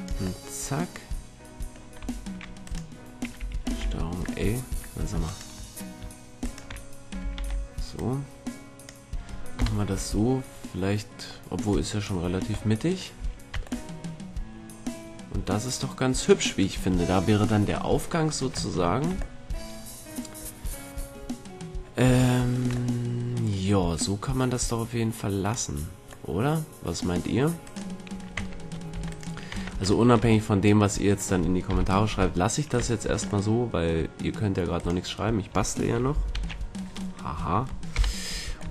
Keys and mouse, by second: 1.4-2.8 middle drag, 2.2 a, 2.8-4.6 right drag, 3.8 ctrl+l, 7.5 ctrl+l, 8.1-10.3 drag, 8.1 right click, 9.7 KP_1, 10.3 middle click, 11.8 click, 13.3 a, 13.7 Tab, 19.6-21.8 middle drag, 22.6-25.0 middle drag, 26.0-27.8 middle drag, 27.8 right click, 28.5 Tab, 29.1 Tab, 29.7 Tab, 30.7 middle click, 31.8 KP_1, 32.4-34.9 middle drag, 34.9-36.5 drag, 36.5 ctrl+l, 38.1 KP_1.